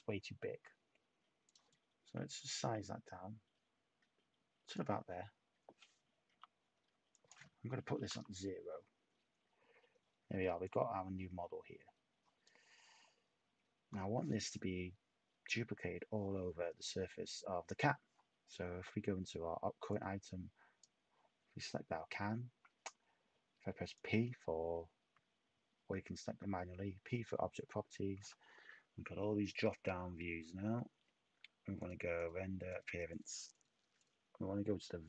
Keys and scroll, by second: 6.3 t, 8.0 0, 8.1 Tab.